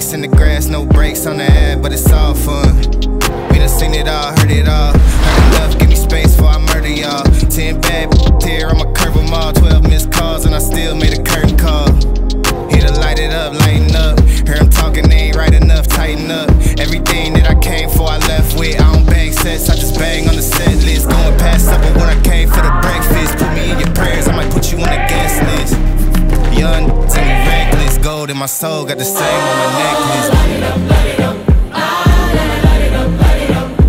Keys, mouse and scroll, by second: 13.1 space, 15.6 space, 16.8 click, 19.6 space, 22.6-26.4 drag, 26.7 right click, 27.4 click, 28.9-29.8 typing, 30.1 click.